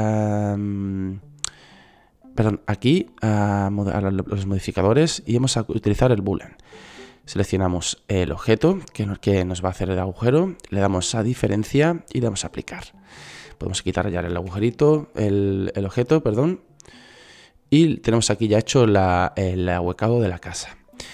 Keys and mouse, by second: 1.3 click, 2.8-3.9 drag, 6.9 click, 9.4-10.6 drag, 13.5 middle click, 14.5 Delete, 17.4-19.2 drag.